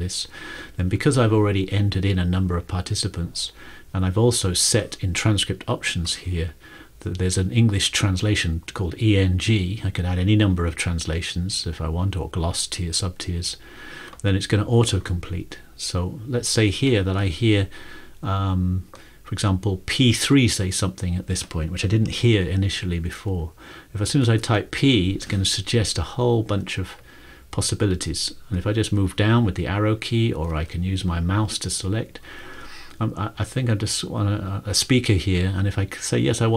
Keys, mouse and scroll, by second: 14.3 click, 16.7 click, 24.4 typing, 28.5-29.9 typing, 28.7 Down, 28.9 Down, 31.1-31.9 typing.